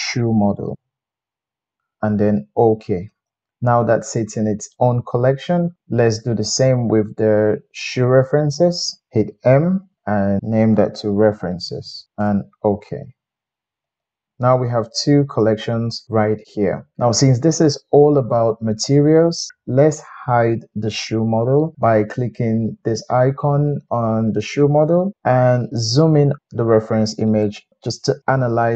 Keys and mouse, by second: 0.7 BackSpace, 4.8-6.1 middle drag, 6.4 click, 8.0 shift+click, 9.7 m, 11.9-24.8 middle drag, 24.8 click, 25.1-28.7 middle drag.